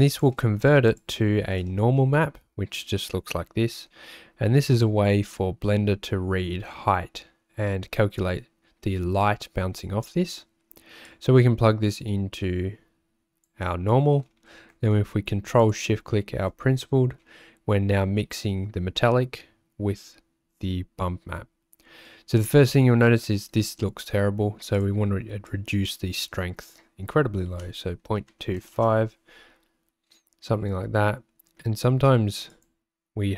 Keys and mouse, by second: 0.1 click, 1.2 ctrl+shift+click, 11.2-13.5 drag, 15.9 ctrl+shift+click, 24.8-29.0 drag, 32.6-33.3 drag.